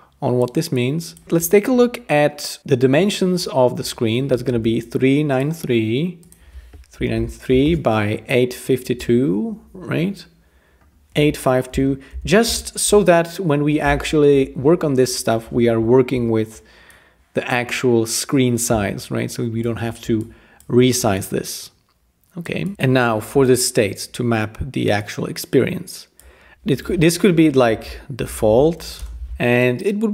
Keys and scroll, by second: 4.5 f, 6.7-7.6 typing, 11.5-12.8 typing, 27.4-29.3 typing.